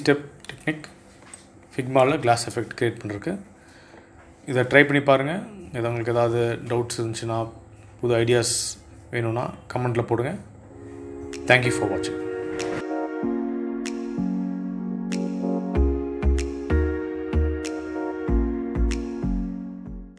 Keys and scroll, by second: 0.3 space.